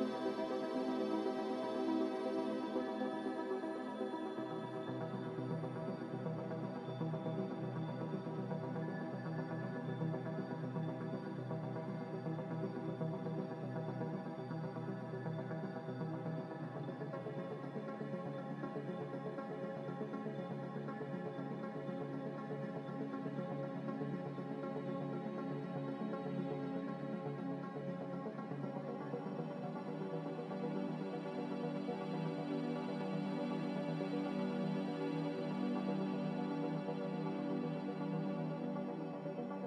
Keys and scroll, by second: 1.8 F9, 2.5 z, 3.2 z, 4.4-6.9 typing, 10.6 z, 24.7 a, 31.3 5, 33.0 5, 33.4-36.2 Return, 34.0 a.